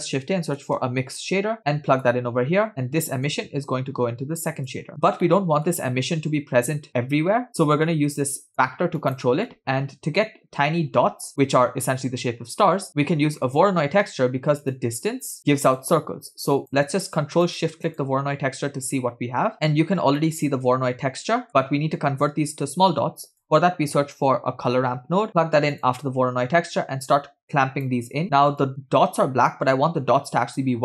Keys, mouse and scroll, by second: 3.3-4.8 drag, 6.3 middle click, 8.5 drag, 9.5-11.1 middle drag, 11.2 shift+a, 15.8 click, 17.5 ctrl+click, 17.9 ctrl+shift+click, 19.5 middle click, 19.5 scroll down 2, 20.2-21.5 middle drag, 23.1 shift+a, 27.4 click, 28.7 click.